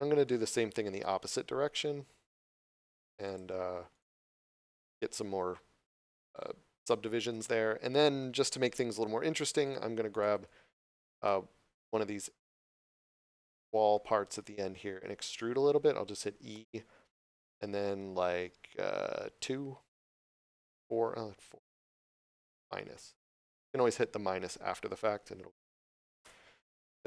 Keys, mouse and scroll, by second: 1.8 scroll up 1, 3.1 click, 3.8 right click, 4.5 middle click, 8.8 3, 9.5 right click, 10.0 shift+right click, 11.1 middle click, 13.8 scroll up 1.